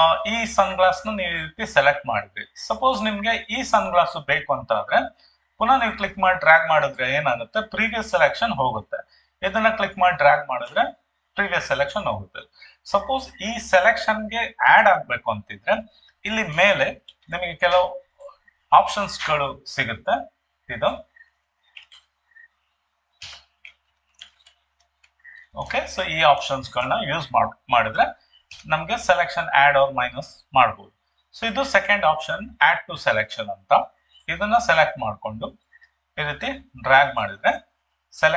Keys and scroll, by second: 17.1 ctrl+shift+2, 23.2 Escape, 28.5 Escape.